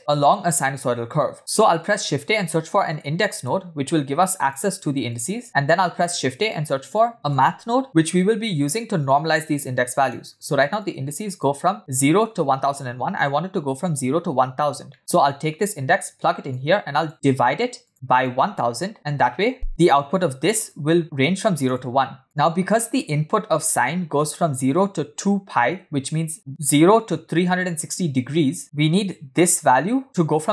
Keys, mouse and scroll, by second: 1.4 middle click, 1.6 shift+a, 5.6 shift+a, 9.0-10.1 drag, 10.8 click, 11.4 click, 14.9-15.5 middle drag, 15.6-16.6 drag, 17.0-17.9 drag, 18.1-19.2 drag, 18.9 0, 19.7 click, 20.7 click, 23.3 click, 28.9-30.5 drag.